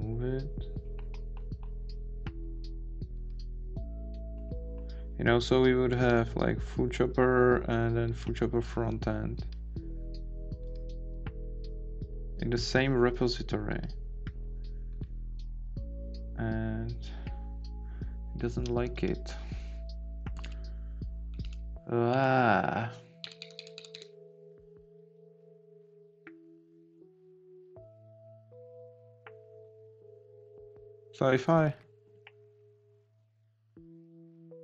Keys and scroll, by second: 20.4 Right, 21.3 Down, 21.4 Right, 22.1 Down, 22.2 Right, 24.2 Down, 30.4 Up.